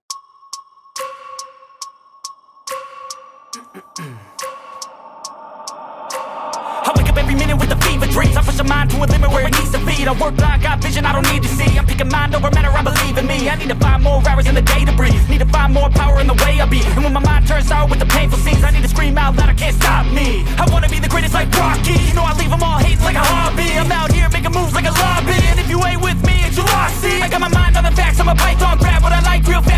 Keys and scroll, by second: 16.4 ctrl+i, 24.9 x.